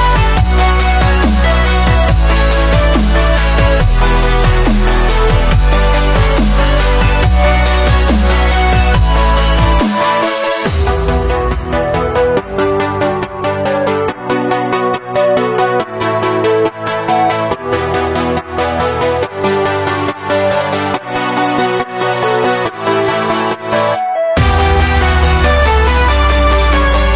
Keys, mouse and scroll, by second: 0.5-1.5 drag, 1.5 ctrl+r, 3.7 ctrl+z, 4.6-5.2 drag, 5.2 ctrl+r, 9.3 s, 12.5 scroll up 1, 12.5 middle click, 13.2 ctrl+r, 15.7-16.8 middle drag, 16.8 ctrl+r, 20.0-21.5 middle drag, 21.5 ctrl+r, 23.5 ctrl+b, 26.0 3, 26.1 click, 26.7-27.1 middle drag.